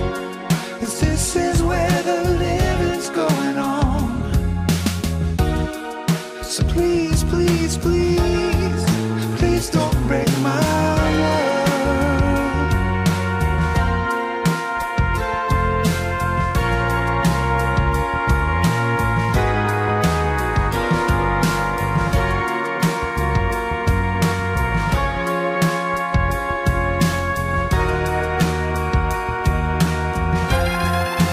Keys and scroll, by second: 9.0 alt+shift+Page_Up, 12.1 alt+Page_Down, 13.1 alt+Return.